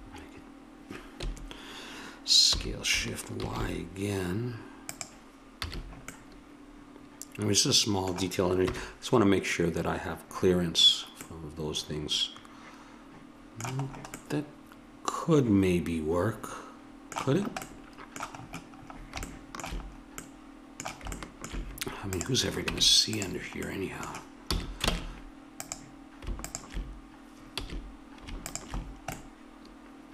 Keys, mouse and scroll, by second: 2.5 s, 5.6 a, 8.7 KP_1, 11.3 middle click, 14.2-16.0 middle drag, 17.4-19.5 middle drag, 22.1 right click, 22.7 Tab, 22.7 click, 23.7 click, 24.5 a, 24.9 ctrl+Tab, 27.6 a, 29.0-30.1 middle drag.